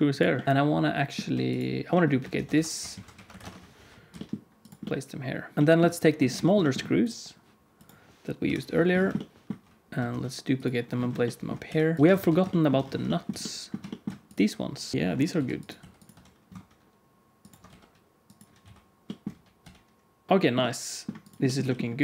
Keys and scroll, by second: 2.3 shift+d, 4.0 g, 5.5 alt+a, 5.5 ctrl+s, 5.5 g, 8.4 KP_1, 10.0 shift+d, 11.6 g, 12.0 alt+z, 12.0 alt+a, 12.1 ctrl+s, 14.9-16.0 typing, 17.6-19.5 typing, 21.5 g.